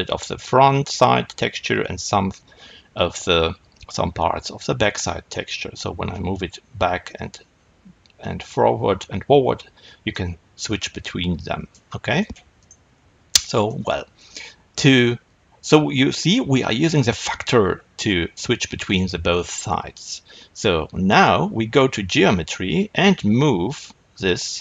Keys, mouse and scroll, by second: 2.8-4.9 scroll up 1, 4.9-6.1 scroll down 2, 6.1-12.5 drag, 12.5 shift+right click, 13.2-21.0 middle drag, 21.0 click, 24.4-24.6 drag.